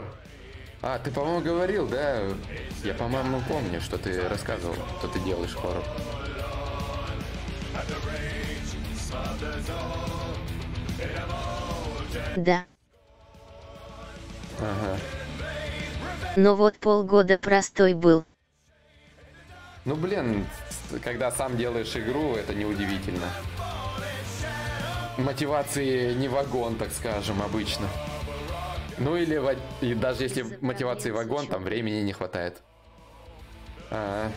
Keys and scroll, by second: 16.4 shift+e, 17.5-20.4 typing.